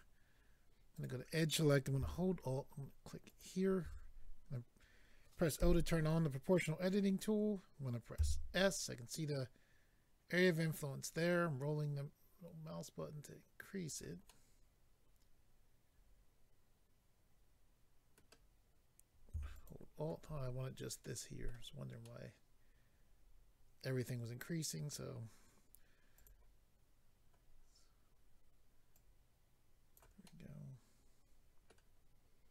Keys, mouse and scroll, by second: 0.9 click, 1.0 click, 3.2 alt+click, 3.4 alt+click, 10.3-10.7 scroll down 4, 13.8 click, 13.9 click, 14.2 middle click, 19.5 alt+click, 19.6 alt+click, 21.0 middle click, 21.6-22.0 scroll down 2, 22.0 middle click, 26.1 click, 28.9 click, 30.3 middle click, 32.0-32.5 scroll up 2.